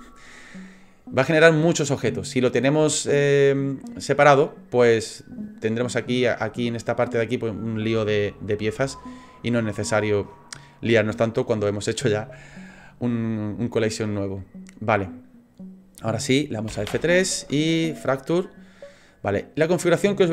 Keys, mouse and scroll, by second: 16.7 F3.